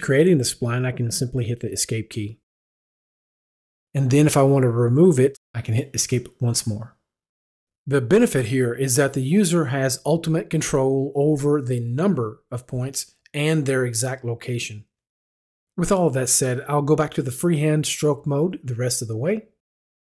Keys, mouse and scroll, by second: 3.0 Escape, 6.0 Escape, 15.4 Escape, 16.7 click.